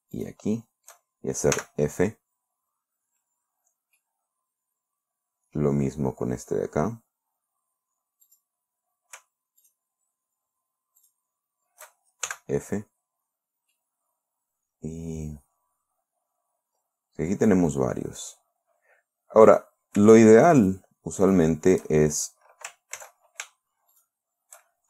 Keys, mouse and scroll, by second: 0.6 shift+right click, 2.0 f, 4.5-6.3 middle drag, 8.7 right click, 10.1 shift+right click, 11.5 shift+right click, 12.7 shift+f, 14.2-18.2 middle drag, 18.4 scroll up 2, 19.9 right click, 21.1 shift+right click, 21.7 shift+right click, 23.5 ctrl+z, 24.4 shift+right click.